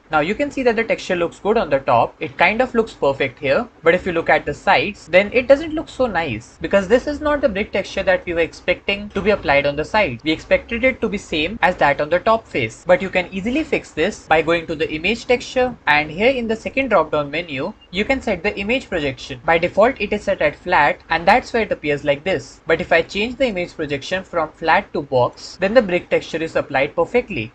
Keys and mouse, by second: 0.4-1.0 middle drag, 4.3-5.0 middle drag, 11.6-12.8 middle drag, 16.6-21.0 drag, 23.4-25.2 drag, 26.0-27.2 middle drag.